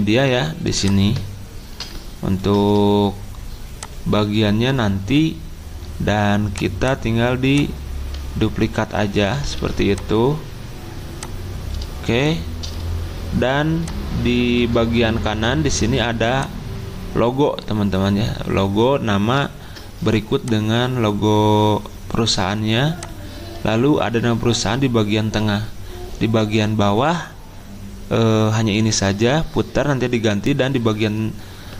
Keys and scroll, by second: 9.6 ctrl+d, 12.1 e.